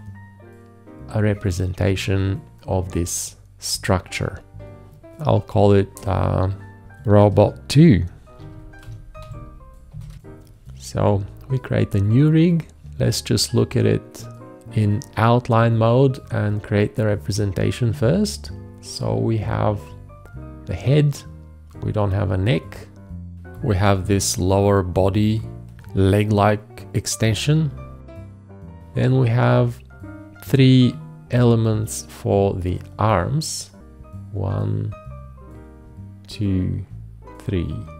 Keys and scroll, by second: 7.5-9.9 typing.